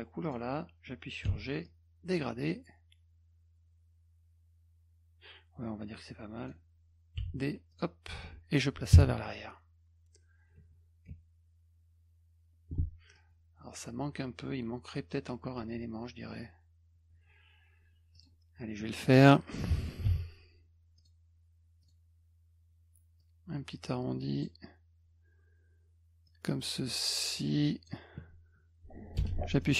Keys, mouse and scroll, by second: 0.2 click, 1.2 g, 1.6-6.5 drag, 7.2 d, 7.7 click, 13.1 click, 18.1 click, 20.1 b, 21.0 click, 21.8 click, 23.2-24.4 drag, 26.2-27.9 drag, 29.6 middle click.